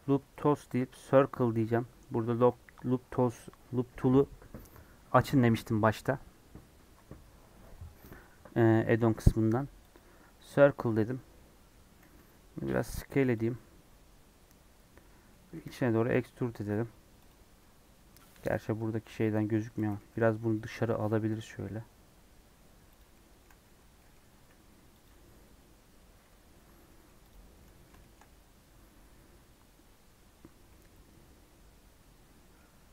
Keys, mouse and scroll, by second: 9.9 right click, 10.4 middle click, 11.1 scroll down 2, 11.3 middle click, 12.0 s, 13.5-15.6 middle drag, 15.6 e, 17.5-18.5 middle drag, 18.5 scroll down 1, 18.7 middle click, 19.3 Tab, 19.8 g, 20.7 g, 23.1 middle click, 23.4 Tab, 23.9 middle click, 24.3 s, 25.1 scroll down 3, 25.7 scroll up 1, 26.2 Tab, 26.4 scroll down 3, 26.8 middle click, 27.2 click, 27.4 scroll down 1, 27.5-32.5 middle drag, 32.5 scroll up 5.